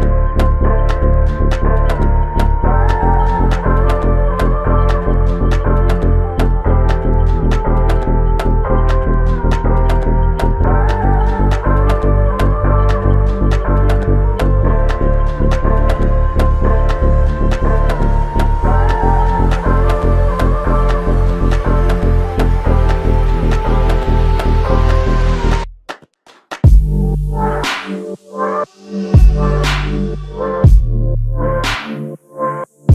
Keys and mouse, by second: 22.6 double click, 29.3 shift+click, 32.8 alt+click.